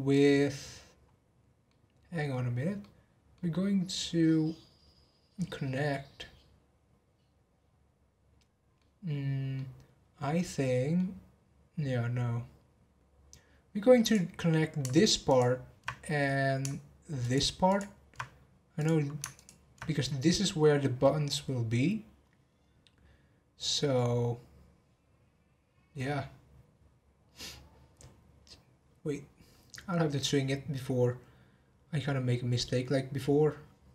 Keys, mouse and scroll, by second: 2.8-7.4 middle drag, 9.5-12.6 middle drag, 14.0 click, 15.2 ctrl+click, 17.2 ctrl+click, 17.6 ctrl+click, 18.7 click, 19.3 ctrl+click, 27.1-28.1 scroll down 1, 28.1 scroll up 1.